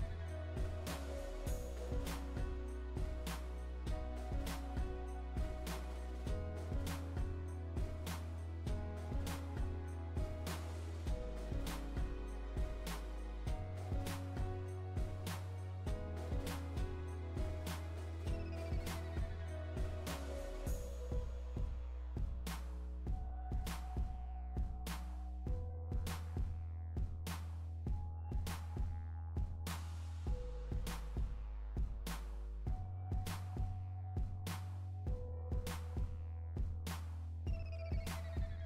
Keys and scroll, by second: 13.5 Return.